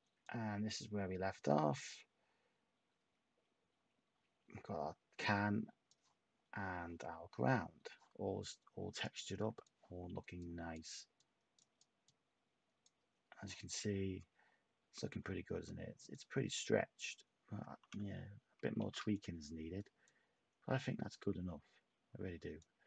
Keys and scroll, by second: 18.7 a.